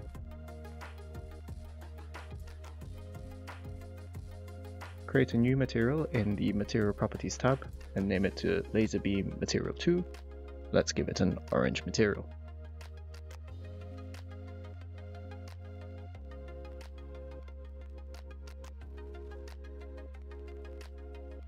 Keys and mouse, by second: 0.1-2.8 typing, 0.3 Return, 0.9 middle click, 1.3 Tab, 1.4 middle click, 2.4 shift+middle click, 2.7 click, 3.1 middle click, 3.3 shift+middle click, 5.0-5.4 shift+middle drag, 9.0 click, 9.8-12.0 drag, 15.5 click, 17.8 click, 18.7 click, 19.6 click.